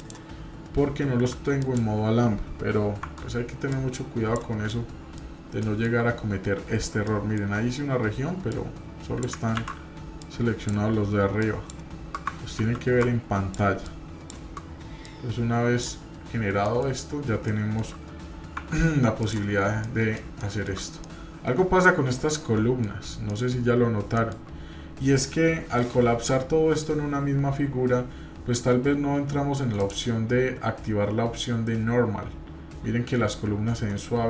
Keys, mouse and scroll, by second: 0.0 click, 1.3 Tab, 1.6 click, 3.0 Tab, 3.7 click, 4.7 middle click, 5.6 shift+middle click, 6.7-7.1 scroll up 1, 7.1 shift+middle click, 9.6 ctrl+z, 10.2 click, 13.0 ctrl+shift+click, 15.0-16.0 drag, 16.1-16.5 scroll down 3, 16.7 middle click, 16.9 scroll up 2, 17.5-17.9 shift+middle drag, 18.6 Tab, 19.2 click, 19.8 middle click, 21.0-22.9 middle drag, 23.3 middle click, 23.7 scroll up 1, 24.0-24.4 shift+middle drag, 24.5 scroll up 1, 29.8 click, 30.7 scroll down 2, 31.8-32.2 scroll down 1.